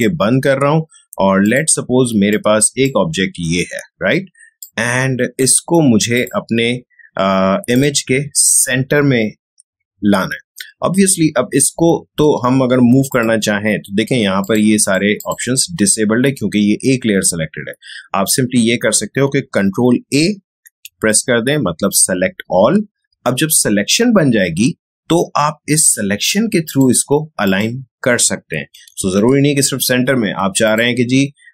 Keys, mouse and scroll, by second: 13.0 click, 19.0 click, 20.5 ctrl+a, 26.6 click, 29.0 ctrl+d, 30.6-31.5 drag.